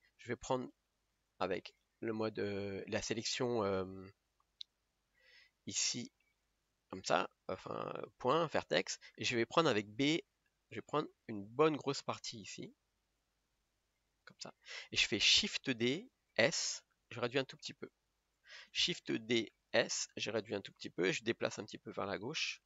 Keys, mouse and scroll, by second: 8.4 click, 16.0 shift+d, 19.7 shift+d, 21.1 g.